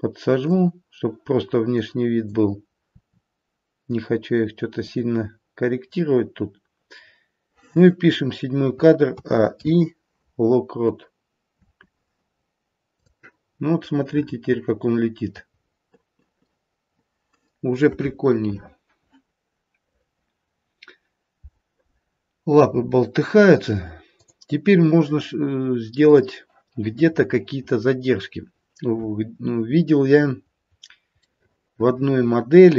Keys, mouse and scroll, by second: 1.7 click, 2.8 r, 9.0 a, 9.5 i, 11.5 space, 13.0 click, 13.3-15.5 scroll down 3, 13.8 middle click, 15.5-16.8 scroll up 2, 17.4 middle click, 24.1 click, 25.9 click, 28.6-29.0 scroll up 1, 29.6-31.3 scroll up 4, 31.3 middle click, 31.3-32.7 scroll up 2.